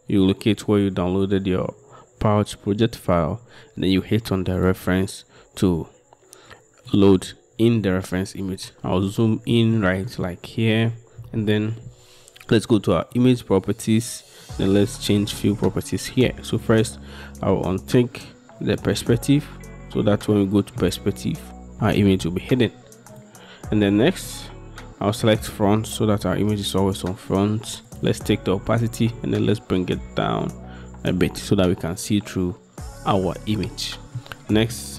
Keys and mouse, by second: 9.8-10.1 shift+drag, 13.1 click, 18.0 click, 20.4 middle click, 25.4 click, 27.9 click, 29.2-31.7 drag, 33.7-34.2 middle drag, 34.8 middle click.